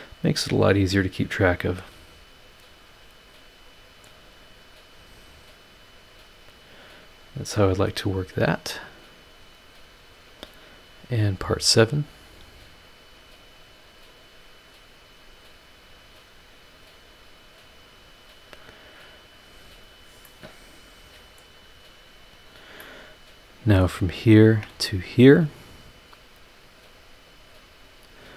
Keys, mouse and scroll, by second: 3.0-4.2 drag, 5.2-7.4 drag, 9.2 click, 10.4 click, 12.7 click, 14.4-15.9 drag, 16.4-18.0 drag, 19.1 click, 20.1 scroll up 1, 20.3-21.6 middle drag, 21.6 scroll up 1, 22.5-24.0 drag, 22.8-24.0 right drag, 24.4 ctrl+click, 26.9 click, 28.0 click.